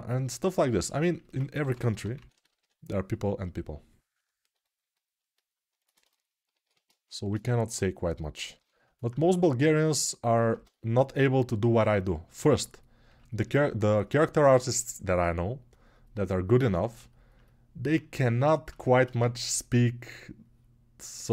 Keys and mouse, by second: 1.4 g, 7.0 shift+r, 8.4 ctrl+r, 10.9 g, 18.9 1.